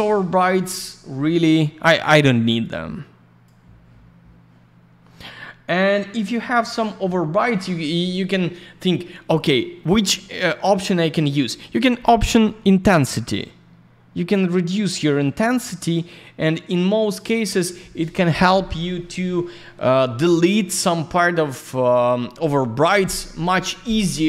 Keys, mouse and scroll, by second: 0.0 alt+r, 0.1 click, 0.7 click, 0.8 click, 2.6 click, 5.8 scroll up 1, 10.7 scroll down 1, 12.8 click.